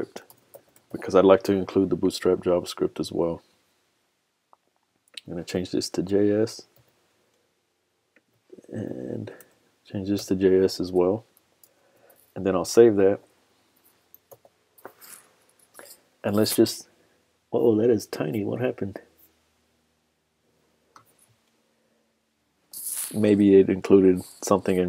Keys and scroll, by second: 11.6 super+s, 12.6 super+Tab, 14.4 super+r.